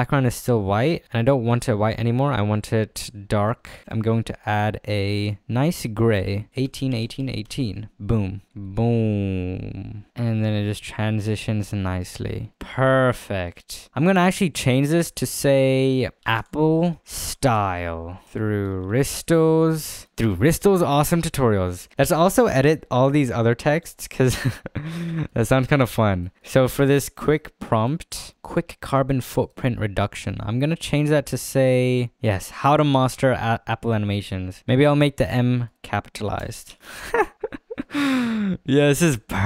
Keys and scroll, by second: 6.5 1, 6.6 8, 6.8 1, 6.9 8, 7.4 Return, 8.5 Right, 9.1 Right, 13.7 Left, 16.2-20.1 typing, 32.1 typing, 34.0-34.7 typing, 36.8 d, 36.8 ..